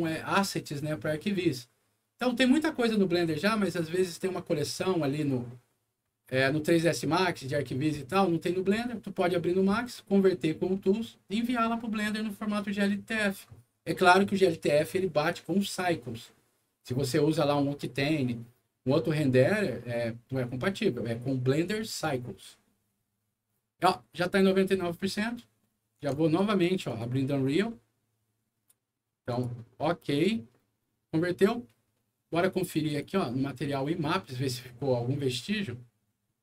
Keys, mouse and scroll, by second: 26.8 click, 29.2 click, 30.0 click, 32.8 click.